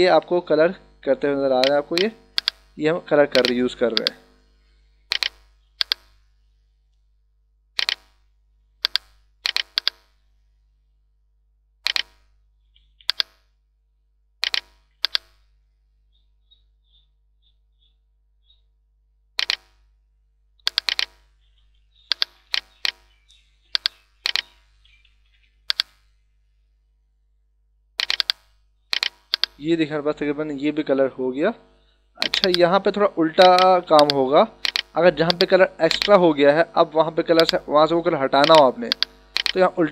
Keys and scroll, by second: 12.7 [, 14.8 [, 22.1 h, 23.6 e, 25.2 ], 33.7 [.